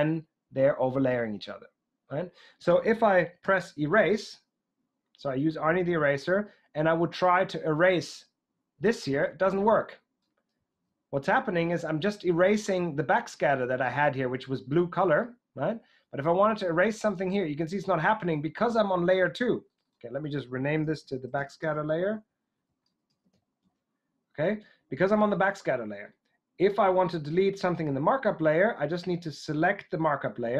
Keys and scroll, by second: 3.4 e, 10.8 super+z, 11.7 super+z, 20.4-23.7 typing.